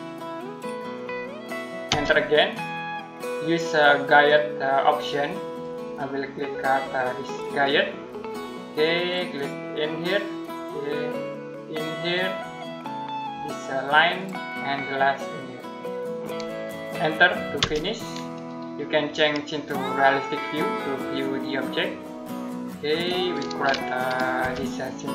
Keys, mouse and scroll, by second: 1.7 space, 5.3 click, 17.4 space, 19.3 click, 24.2 F7, 24.8 middle click.